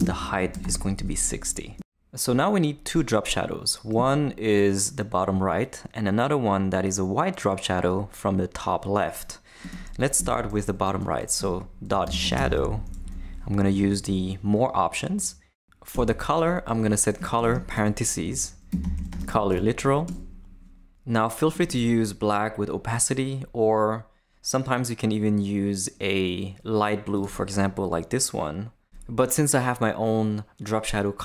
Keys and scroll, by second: 0.0-1.1 typing, 10.2 Return, 11.1-12.9 typing, 13.0 Down, 13.7 Return, 15.9 Return, 17.1-19.8 typing, 18.2 shift+Left, 20.1 Return.